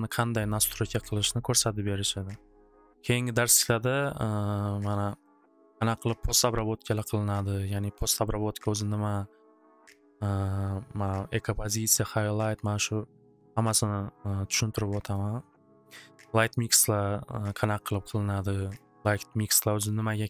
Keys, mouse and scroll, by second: 1.1 click, 1.6 click, 5.3 click, 5.5 click, 6.6 click, 7.0 click, 15.1 click, 16.3-18.2 drag, 18.7 click, 19.1 click, 19.5 click, 20.0 click, 20.2 click.